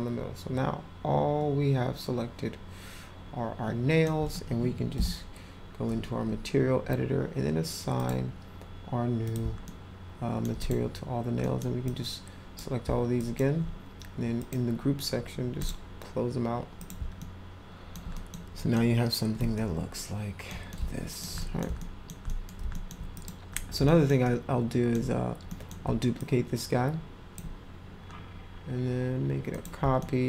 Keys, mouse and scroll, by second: 7.9 click, 9.2 click, 9.6-10.4 alt+middle drag, 10.6 click, 11.4 middle drag, 11.8 click, 13.1 alt+drag, 14.4 click, 15.6 click, 16.7 click, 17.2-17.9 alt+middle drag, 18.1 middle drag, 18.6 middle click, 19.5 alt+middle click, 20.7 alt+middle click, 21.4 middle click, 21.8 alt+middle click, 22.2 middle click, 22.7 alt+middle click, 23.1 click, 23.8 alt+middle click, 24.2 alt+middle click, 25.5 middle click, 26.2-27.3 shift+drag, 29.5 click, 30.0 alt+middle click.